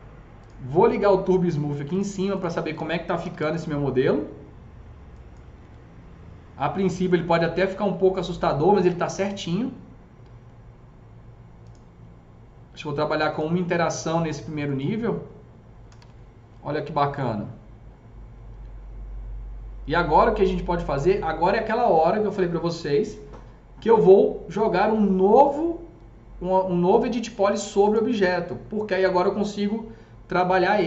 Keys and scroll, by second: 2.9-3.8 typing, 5.5 F3, 15.5-16.4 typing.